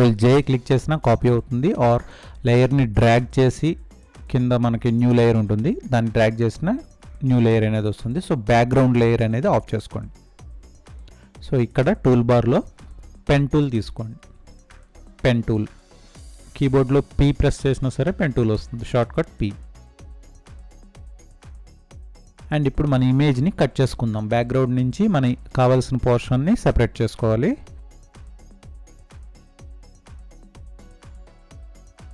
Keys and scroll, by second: 11.6 space.